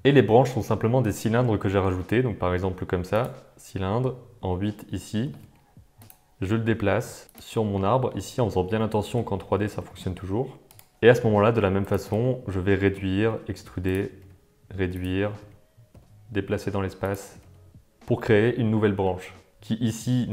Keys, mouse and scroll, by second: 1.9 shift+a, 5.2 r, 10.9 g, 11.3 s, 12.3 click, 13.3 e, 14.2 s, 15.4 g, 17.3 g, 19.2 Tab, 19.5 alt+a.